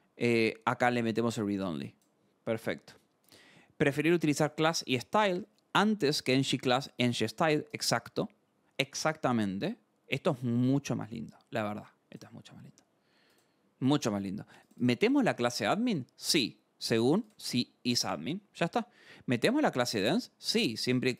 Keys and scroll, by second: 2.5 scroll.